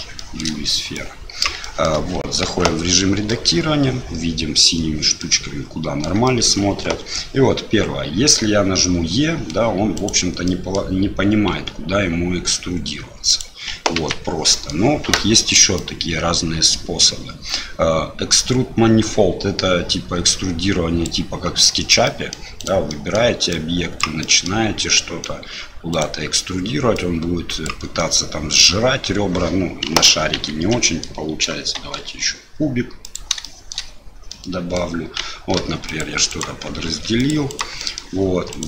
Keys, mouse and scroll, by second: 0.3 shift+middle click, 1.0 click, 1.7 shift+middle click, 2.4 Tab, 3.2 click, 5.1 click, 6.2 shift+middle click, 8.3 e, 10.5 middle click, 10.6 click, 11.5 s, 13.9 ctrl+z, 14.5 middle click, 15.8-22.0 drag, 22.0 middle click, 22.5 click, 22.8 middle click, 23.5 click, 24.2 middle click, 24.9 middle click, 25.9 click, 26.9-28.0 drag, 28.1 middle click, 30.0 ctrl+z, 30.3 ctrl+z, 30.8 click, 31.7 shift+a, 33.5 shift+click, 34.3 click, 35.5 ctrl+r, 36.8 ctrl+r, 37.9 click, 38.5 click.